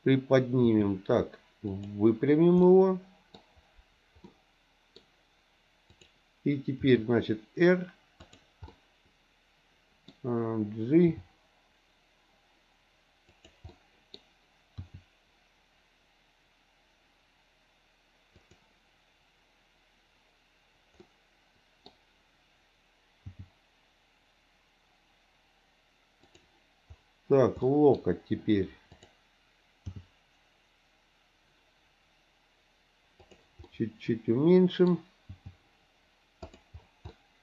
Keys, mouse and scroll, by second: 0.5 r, 2.6 middle click, 4.2 middle click, 5.9 click, 6.8 r, 8.7-10.0 middle drag, 11.0 g, 13.7 middle click, 14.8 r, 21.0 middle click, 23.2 g, 27.7 middle click, 28.9 click, 29.9 g, 33.7-34.9 middle drag, 35.3 g, 37.1 middle click.